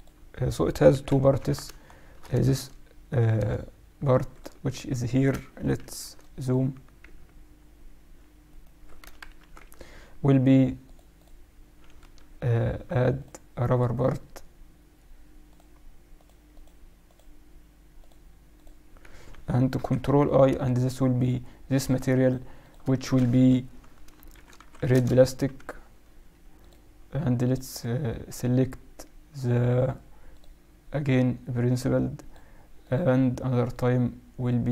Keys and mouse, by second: 0.8 KP_1, 1.3 Tab, 1.8-3.5 middle drag, 2.3 a, 2.5 a, 3.3 a, 4.2-6.2 drag, 4.4 z, 5.7 shift+b, 7.0 z, 8.4-10.3 right drag, 9.2 ctrl+KP_Add, 9.5 z, 10.8-12.8 drag, 13.2-14.9 drag, 15.4-20.2 drag, 19.7 ctrl+i, 21.1-24.4 drag, 26.5-29.2 drag, 31.6-34.6 drag.